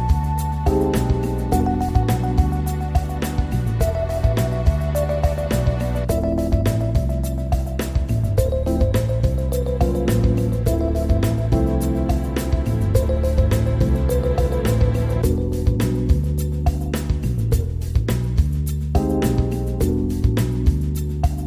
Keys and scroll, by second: 5.5 ctrl+z, 12.6 ctrl+r.